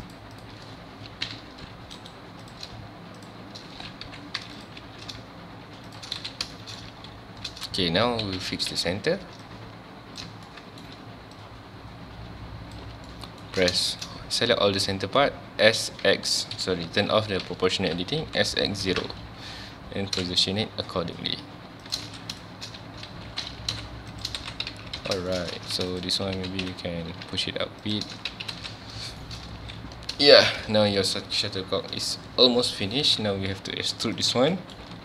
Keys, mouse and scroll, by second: 0.4 click, 1.3 o, 2.1 right click, 2.4 click, 2.6 g, 3.3 shift+click, 4.1 o, 4.6 click, 4.8 g, 6.0 shift+click, 6.2 alt+a, 6.3 scroll down 1, 6.6 shift+middle click, 6.9 ctrl+s, 7.4-8.4 scroll up 1, 8.4 1, 8.7 z, 9.4 click, 10.5 shift+middle click, 11.4 shift+click, 13.1-13.5 shift+middle drag, 13.5-13.9 shift+scroll down 2, 13.9-15.2 shift+middle drag, 15.2 scroll up 1, 15.5 s, 17.5 o, 19.0 KP_Enter, 19.5 z, 21.9 shift+click, 22.0 alt+a, 22.3 scroll down 1, 22.4 shift+middle click, 22.7-23.1 scroll up 2, 23.1 ctrl+z, 23.6 g, 24.2 shift+click, 24.4 alt+a, 24.7 Tab, 25.0 alt+a, 25.3 shift+middle drag, 25.5 ctrl+scroll up 1, 25.6 ctrl+s, 25.9 click, 26.1 Tab, 26.2 scroll up 1, 26.4 1, 26.6 z, 27.9 click, 28.1 z, 28.3 Tab, 28.5 alt+a, 28.7-29.0 scroll down 1, 29.2-29.6 shift+middle drag, 29.6 ctrl+s, 29.9 scroll up 1, 30.3 shift+middle click, 30.7 scroll up 1, 30.9 scroll down 1, 33.5 scroll up 1, 34.2 click, 34.3 Tab, 34.5 middle drag, 34.8 a.